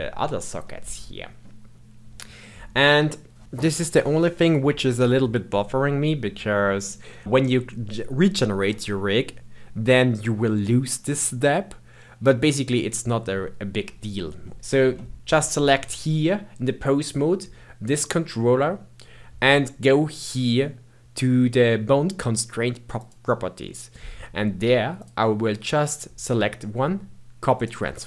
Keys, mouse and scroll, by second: 14.5-15.1 shift+middle drag, 15.1 click, 22.9 click, 24.8-28.0 drag.